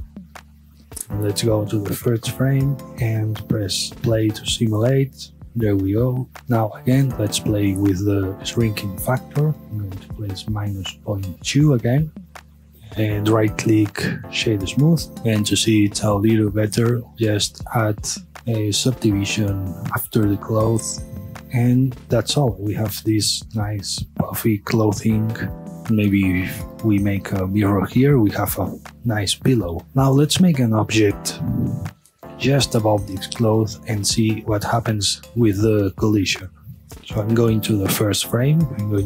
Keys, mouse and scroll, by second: 1.8-3.2 drag, 3.2 space, 15.9 space, 17.0 click, 20.6 scroll up 1, 20.8-21.4 middle drag, 25.7 space, 26.0-26.4 middle drag, 26.4 space, 27.5 space, 27.7-31.6 middle drag, 32.5-37.0 middle drag, 37.8-39.0 drag.